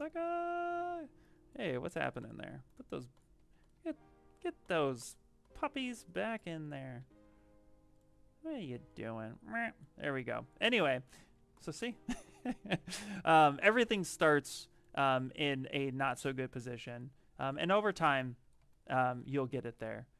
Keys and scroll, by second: 0.0 q, 0.6 shift+f, 4.2 ctrl+z, 6.2 ctrl+z, 6.9 w, 11.1 q, 12.7 w, 17.6 q.